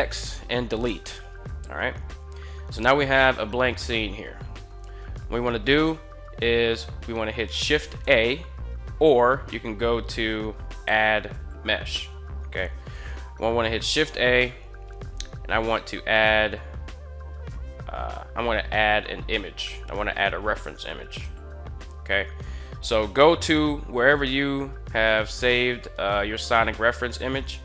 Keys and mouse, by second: 3.7-4.4 shift+middle drag, 7.7 shift+a, 10.4 click, 12.6 shift+a.